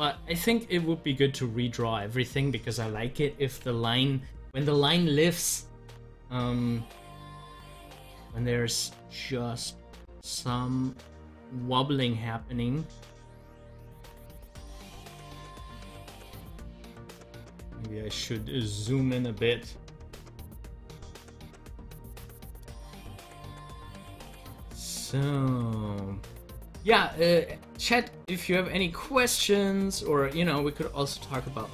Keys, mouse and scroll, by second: 5.1 click, 9.2-14.1 drag, 14.1-15.4 drag, 15.4 ctrl+z, 18.1-21.6 middle drag, 21.6-23.0 drag, 23.0 ctrl+z, 24.4-26.7 drag, 26.7 ctrl+z, 29.2 ctrl+z.